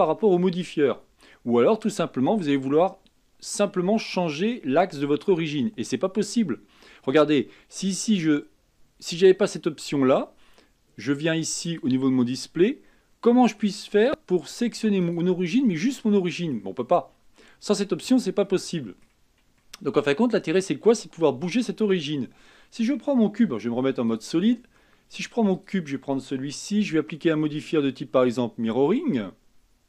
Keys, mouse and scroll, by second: 1.3-4.5 middle drag, 6.8-9.5 middle drag, 9.5 click, 11.7 click, 12.9-13.3 scroll down 3, 13.3-13.9 middle drag, 13.9-15.1 scroll up 4, 15.1 click, 15.8-17.0 middle drag, 17.0-18.5 scroll down 1, 18.5-21.1 middle drag, 21.1-21.7 scroll down 1, 21.7-23.5 scroll down 1, 23.5 z, 24.5 scroll down 3, 24.8-25.6 middle drag, 25.6 click, 27.6 click, 28.3 click.